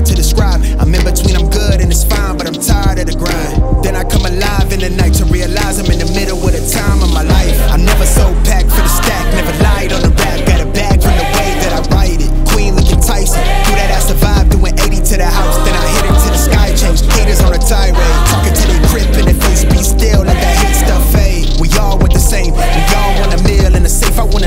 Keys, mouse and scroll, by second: 6.0-14.8 drag, 21.6 click, 24.3 click.